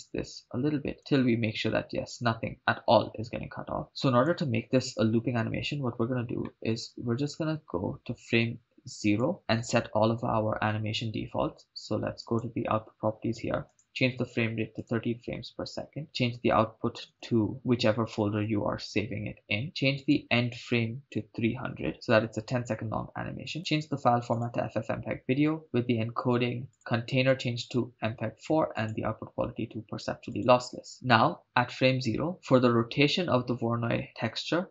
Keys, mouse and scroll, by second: 2.5 scroll down 2, 3.8 scroll down 2, 3.9 middle click, 3.9-4.3 scroll up 1, 5.9 scroll up 3, 6.4 middle click, 7.0-7.5 scroll up 2, 9.2 click, 9.7 Left, 12.2 click, 13.7-15.0 drag, 15.6-16.0 scroll down 3, 16.0-18.6 drag, 17.2 /, 20.0-21.9 drag, 21.9 0, 23.0-23.5 scroll down 2, 23.6-24.8 drag, 25.3-26.0 scroll down 4, 25.6 click, 26.7-28.0 drag, 28.8-30.7 drag.